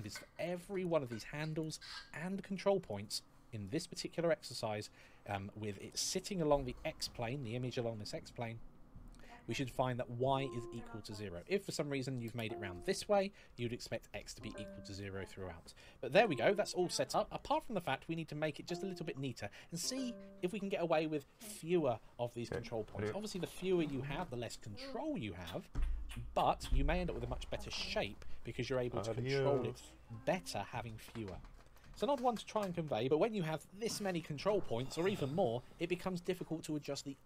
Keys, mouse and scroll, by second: 2.7 click, 11.1 middle click, 14.4 middle click, 16.0 KP_1, 17.5 scroll down 1, 17.9 shift+middle click.